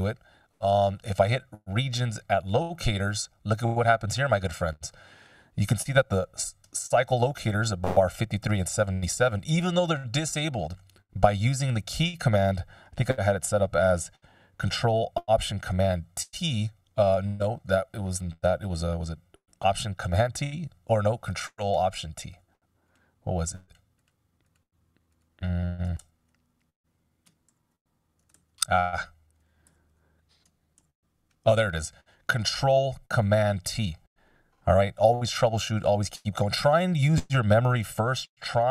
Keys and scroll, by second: 7.2 c, 11.5 super+z, 16.5 ctrl+alt+super+t, 18.7 ctrl+alt+super+t, 22.2 ctrl+alt+t, 25.9 ctrl+alt+t, 27.4 alt+super+t, 28.3 ctrl+alt+super+t, 30.1 ctrl+alt+super+t, 34.9 super+z, 35.6 F16.